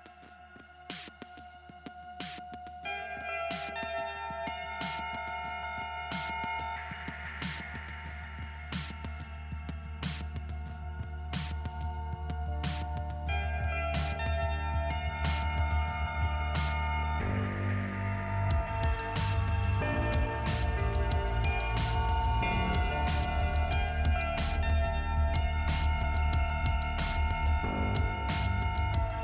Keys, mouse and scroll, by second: 2.9 click, 9.0 right click, 9.6 right click, 10.2-10.8 scroll up 2, 10.8 right click, 12.2 click, 13.1 click, 14.4 scroll up 1, 15.2 m, 16.1 click, 16.2 click, 16.5 typing, 18.1 click, 24.1 click, 24.2 click, 24.5 click, 24.6 double click, 25.3 double click, 27.1-29.0 scroll down 2.